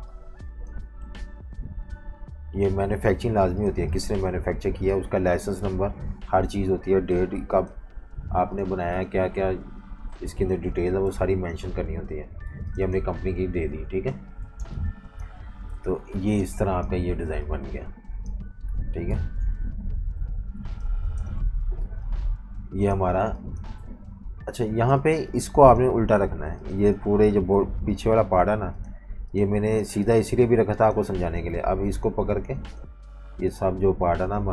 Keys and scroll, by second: 1.1 Caps_Lock, 3.1 super+g, 5.0 super+g, 7.1 super+g, 11.3 Right, 11.5 Right, 13.3 super+-, 13.5 super+-, 14.4-17.3 typing, 15.7 super+-, 18.4 typing, 19.1 super+-, 19.3 super+-, 20.3-23.2 typing, 24.7 v, 24.9 space, 26.3 super+3, 26.9 super+3, 28.2 super+3, 29.6 super+3, 30.3 super+3, 31.0 super+3, 31.5 alt+super+3, 32.2 super+3, 33.0 super+3, 33.7 super+3, 34.3 super+3.